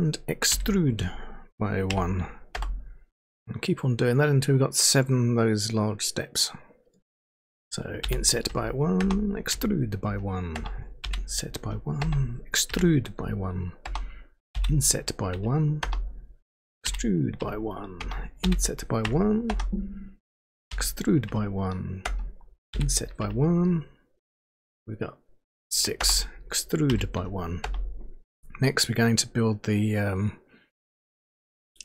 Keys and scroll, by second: 0.5 e, 1.9 1, 2.5 Return, 9.0 Return, 9.5 e, 10.0 1, 10.5 Return, 11.0 i, 11.6 1, 12.0 Return, 12.7 e, 13.2 1, 13.8 Return, 14.5 i, 15.3 1, 15.8 Return, 16.8 e, 17.4 1, 18.0 Return, 18.4 i, 19.0 1, 19.5 Return, 20.7 e, 21.3 1, 22.0 Return, 22.7 i, 23.2 1, 26.0 Return, 26.6-27.6 typing.